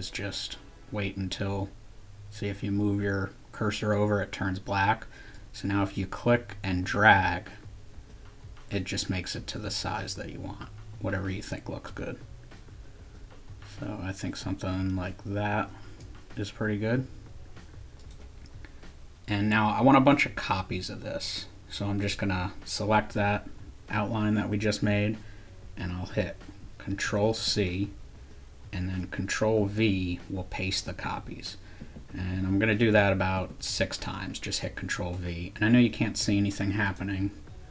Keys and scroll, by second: 27.2 ctrl+c, 29.6 ctrl+v, 30.9 ctrl+v, 31.8 ctrl+v, 32.3 ctrl+v, 32.8 ctrl+v, 33.4 ctrl+v.